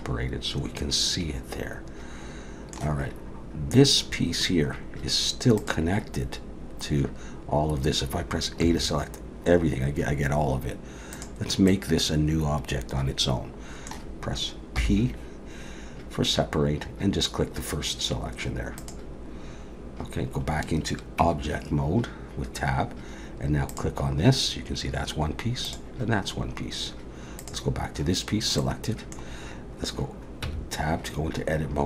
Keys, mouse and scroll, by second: 5.6 click, 11.1 click, 11.1 a, 11.7 middle click, 14.8 p, 21.2 Tab, 23.7 click, 25.6 click, 27.4 click, 28.6 middle click, 30.4 Tab.